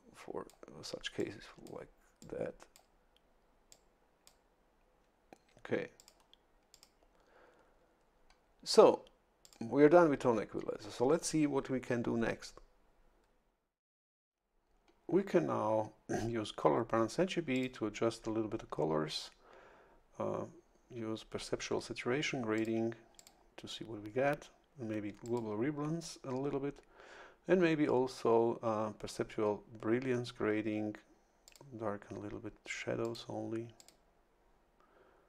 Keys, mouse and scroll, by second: 1.2 click, 2.2 click, 3.7 click, 6.0 click, 6.7 click, 9.4 click, 17.5 click, 22.5 click, 23.2 click, 25.2 click, 31.4 click, 33.0 click, 33.8 click.